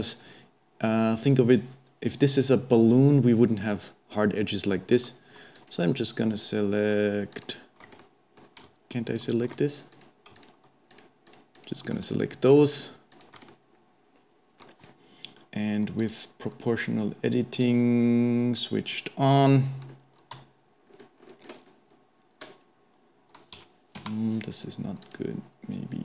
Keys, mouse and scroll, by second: 5.1-5.9 alt+a, 7.3 alt+click, 7.4 alt+a, 8.0 middle click, 8.7-9.5 alt+a, 9.9 click, 10.4 shift+click, 10.9 shift+click, 11.3 shift+click, 11.5 shift+click, 12.0-13.1 middle drag, 13.1 shift+click, 13.5-16.1 middle drag, 16.1-18.7 drag, 19.5 middle click, 20.3 g, 25.0-26.0 drag.